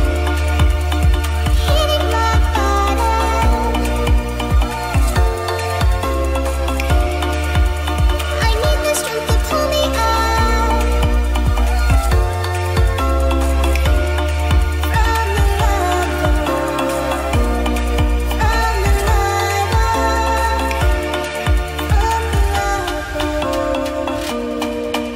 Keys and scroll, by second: 0.7 [, 3.8 ], 11.6 ], 12.5 [, 14.2 ctrl+s, 17.9 [, 18.6 ], 19.6 [, 22.8 [, 23.8 ], 24.8 ].